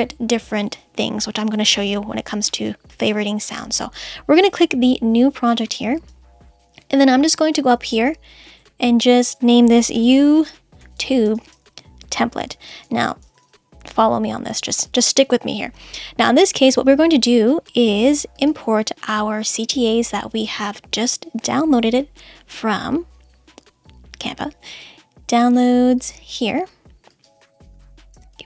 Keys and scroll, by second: 9.9 shift+y, 11.5 space, 12.4 shift+t, 28.2 space.